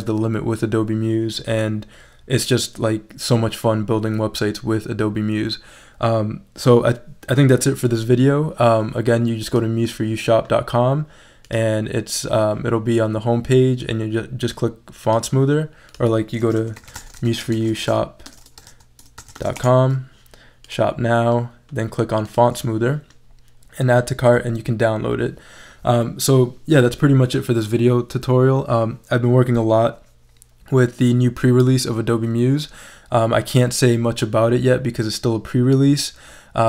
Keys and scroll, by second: 16.4-19.9 typing.